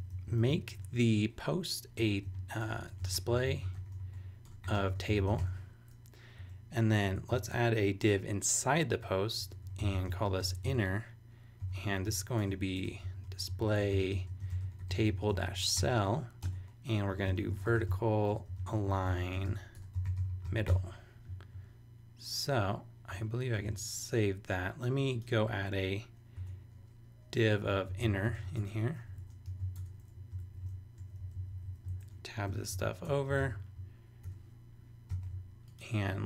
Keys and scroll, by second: 0.5 super+Down, 0.6 super+Right, 0.8 super+Return, 1.7-5.9 typing, 6.4 Down, 6.9 Up, 7.5 super+Return, 8.4 Return, 9.2-15.8 typing, 16.4 Return, 16.9-21.2 typing, 21.3 super+;, 23.6 super+s, 26.4 Return, 27.4-28.8 typing, 29.1 shift+super+Tab, 29.1 shift+super+Right, 29.5 shift+super+c, 29.7 super+BackSpace, 30.1 Down, 30.4 super+Left, 31.2 shift+super+Down, 31.8 shift+super+Down, 32.5 shift+super+], 32.8 super+Right, 33.0 Return, 33.4 super+v, 34.2 super+[, 35.1 super+s.